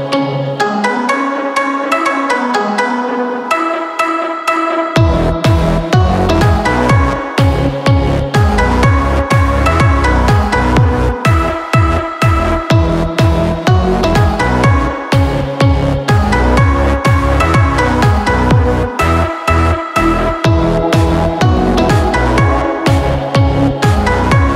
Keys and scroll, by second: 0.1 a, 13.7 ctrl+z, 23.5 p.